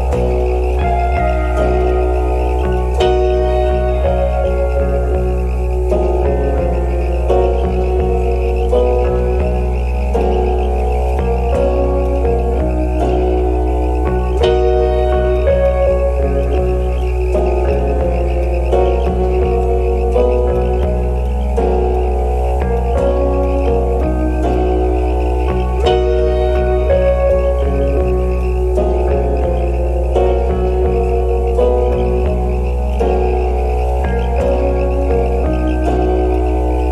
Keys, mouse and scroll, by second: 0.0 alt+scroll up 1, 0.1 alt+middle click, 0.4 alt+click, 0.7 alt+right click, 1.8 double click, 2.5 alt+middle click, 2.8 alt+click, 6.5 alt+middle click, 6.6 scroll down 1, 9.1-9.5 alt+scroll up 2, 9.5 alt+middle click, 10.2 double click, 12.0 alt+click, 14.6-15.0 alt+scroll down 1, 17.7 right click, 22.7 alt+click, 28.1 scroll up 1, 31.3 scroll up 1, 31.5 alt+middle click, 31.9 right click.